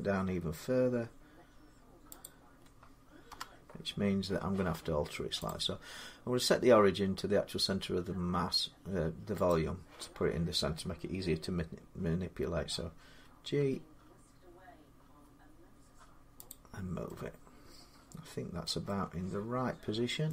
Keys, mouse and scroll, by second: 0.7-2.0 middle drag, 2.0-4.7 drag, 3.1 7, 5.3 click, 9.3 click, 9.3 click, 13.4 g, 16.3-18.4 drag, 16.3 g, 18.5 middle click, 20.1-20.3 middle click.